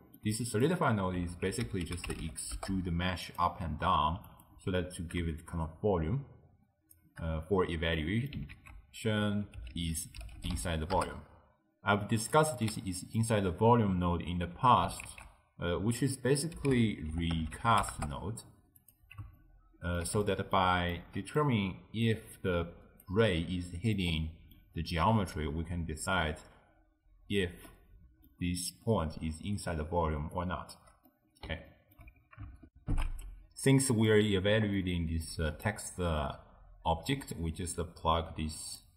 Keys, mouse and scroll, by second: 0.0-1.3 ctrl+middle drag, 1.3 ctrl+a, 4.3 click, 4.6 x, 5.5-8.0 shift+drag, 8.0 middle click, 8.6 ctrl+a, 12.6-15.1 middle drag, 15.1 ctrl+a, 19.4-21.8 ctrl+middle drag, 21.8 d, 22.1-23.1 drag, 23.1 d, 23.2 d, 24.0-27.2 middle drag, 27.7-30.2 middle drag, 30.2 d, 30.4 right click, 30.8 d, 30.9 d, 31.1-32.7 middle drag, 32.7 ctrl+alt+shift+q, 34.1-35.3 middle drag, 35.3 click, 37.4 click.